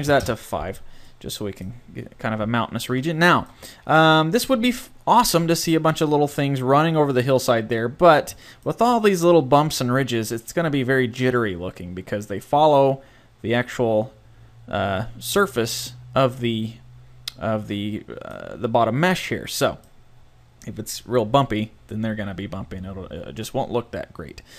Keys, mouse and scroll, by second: 0.8-1.1 scroll up 1, 1.1-4.1 middle drag, 4.7 middle click, 6.6-7.4 scroll up 1.